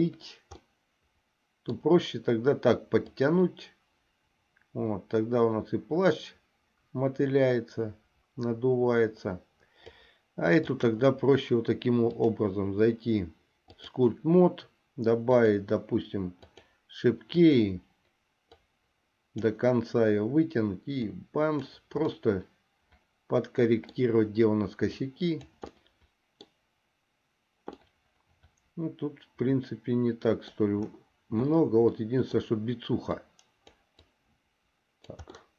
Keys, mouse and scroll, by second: 0.9-2.1 middle drag, 3.4-10.2 drag, 10.9 click, 12.2-14.2 drag, 15.4 click, 16.7 click, 17.6 click, 18.7-19.7 drag, 21.3 click, 22.4-24.2 middle drag, 25.1 click, 26.0 middle click, 28.0-30.8 middle drag, 32.1 middle click, 33.3 click, 34.4-35.4 drag.